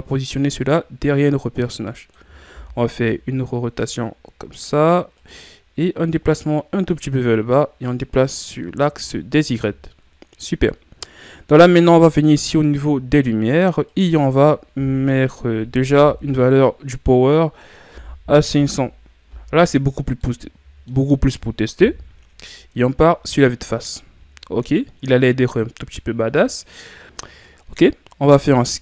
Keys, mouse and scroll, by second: 0.5-2.5 drag, 2.5 r, 6.0-18.6 drag, 18.6 KP_0, 20.2-21.8 middle drag, 21.8 KP_1, 28.3 s.